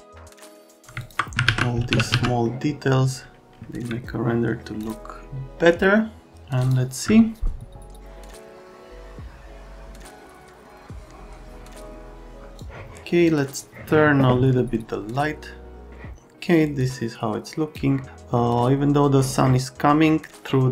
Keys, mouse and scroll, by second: 0.0 right click, 0.1 click, 0.3 click, 0.6 right click, 0.7 F3, 0.9 click, 1.4 alt+q, 1.6-2.6 typing, 2.4 right click, 3.7 c, 4.8 click, 6.6 click, 12.5 click, 15.9 click.